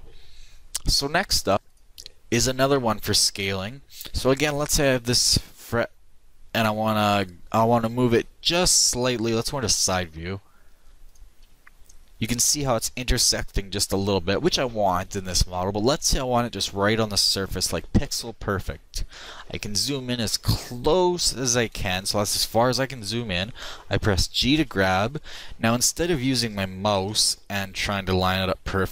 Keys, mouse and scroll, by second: 11.5 KP_3, 24.6 g.